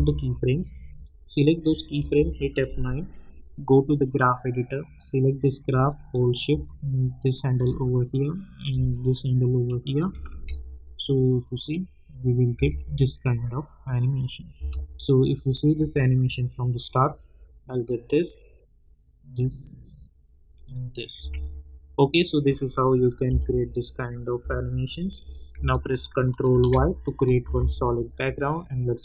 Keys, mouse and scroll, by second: 1.0-2.6 drag, 3.8-10.3 drag, 10.3 space, 12.7 space, 13.1 click, 14.5 space, 21.2 space, 22.5 click, 23.2 typing, 24.4 typing, 25.1 click, 26.5 ctrl+y, 27.4 Return, 28.5 click.